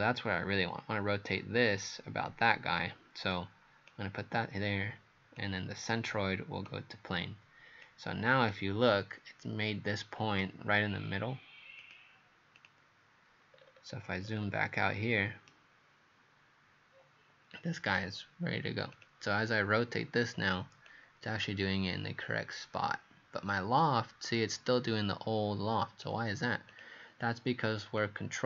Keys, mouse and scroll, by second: 3.3 click, 13.5-15.5 scroll down 14, 15.5 right click, 15.5-18.2 scroll down 1, 19.0 click.